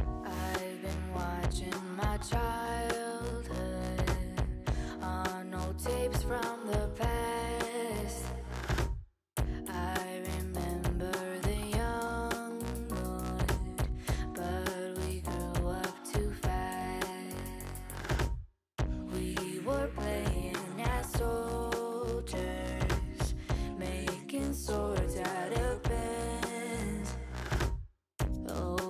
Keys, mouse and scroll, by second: 0.2 KP_3, 0.4 alt+z, 0.8 shift+middle click, 1.6-2.3 scroll up 2, 2.3 2, 2.9 a, 3.5-4.9 drag, 5.3 2, 5.7 alt+click, 6.3 alt+click, 6.9-8.0 middle drag, 8.0-9.4 scroll up 2, 9.6 a, 10.4 m, 12.5-14.2 drag, 14.4 2, 14.7 alt+click, 15.4 shift+click, 16.0 shift+click, 16.6 f, 16.9 click, 17.4 shift+click, 17.9 shift+click, 18.3 f, 18.9 click, 19.3-19.9 scroll down 1, 19.9-22.0 middle drag, 22.0 click, 22.7 shift+click, 23.4 x, 24.7 click, 25.2 a, 25.7 m, 27.2-28.8 drag.